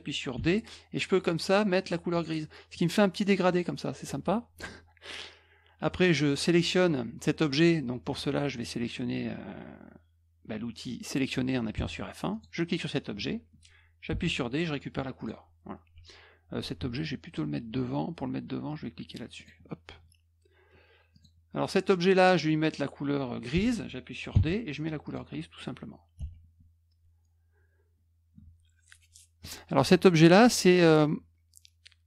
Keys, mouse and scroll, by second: 0.3 d, 2.1 click, 11.7 F1, 12.3 click, 14.0 d, 15.1 click, 15.9 F1, 19.3 click, 21.1 click, 24.3 d, 25.0 click, 26.1 F1.